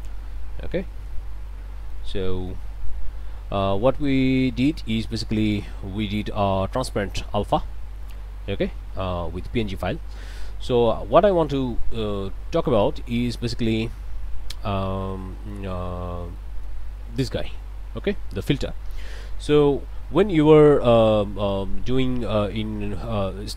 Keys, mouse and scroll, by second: 0.8 ., 1.3-2.7 drag, 3.8-4.2 scroll up 4, 4.3 click, 10.3 middle click, 11.1 shift+click, 11.6 shift+middle click, 12.1 click, 13.3 shift+click, 15.0 click, 16.1 scroll up 2, 16.6 click, 17.1 scroll up 2.